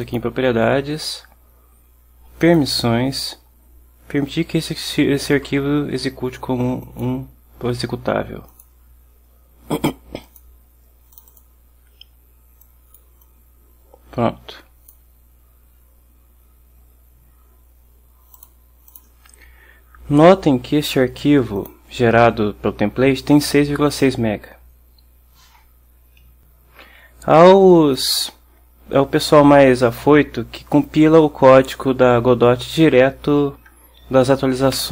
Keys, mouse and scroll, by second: 0.1 click, 2.5 click, 6.9 click, 8.6 click, 10.3 click, 11.2 click, 12.7 click, 14.0-15.2 drag, 18.4 click, 19.0 click, 21.7 click, 28.0 click.